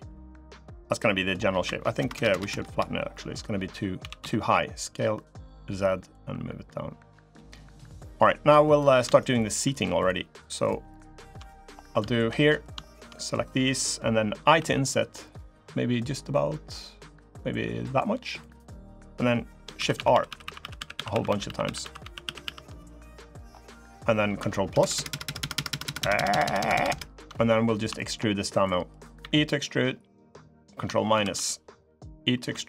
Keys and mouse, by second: 1.7 ctrl+KP_Add, 3.1 ctrl+KP_Add, 3.7 s, 5.9-7.1 drag, 7.3 middle click, 8.4 click, 8.9-10.4 shift+drag, 10.7 shift+click, 11.0 shift+click, 11.2 middle click, 11.8 shift+middle click, 12.2 middle click, 12.6 shift+middle click, 12.9 click, 19.5-22.4 shift+r, 22.8 click, 24.4 ctrl+KP_Add, 25.2-27.0 ctrl+KP_Add, 27.7 shift+click, 28.4 click, 29.0 e, 30.9 ctrl+KP_Subtract, 32.3 e.